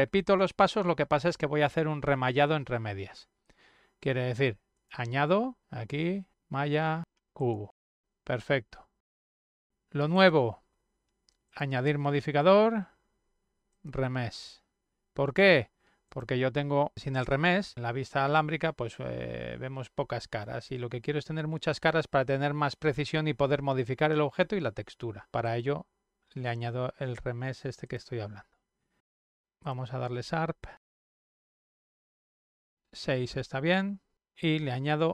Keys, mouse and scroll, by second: 4.2 click, 7.9 click, 10.1 click, 11.4 click, 13.7 click, 15.8 click, 17.8 click, 26.5 click, 28.4 click, 30.0 click, 30.7 click, 30.8 click, 31.2 click, 32.9 click.